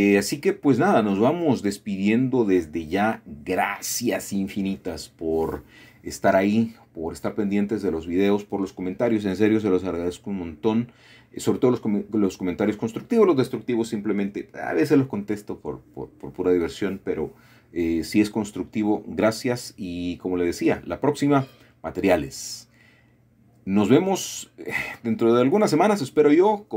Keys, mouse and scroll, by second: 0.1-0.8 typing, 2.7 shift+click, 3.0-4.1 middle drag, 5.2 middle click, 6.4-6.7 scroll down 2, 7.0 middle click, 8.2 middle click, 9.0 middle click, 9.3-10.4 scroll up 2, 9.8 Tab, 13.7 middle click, 14.0-15.6 scroll down 1, 18.2 shift+middle click, 19.0 middle click, 19.4-21.0 scroll up 1, 21.5-23.0 shift+middle drag, 25.7 ctrl+shift+s.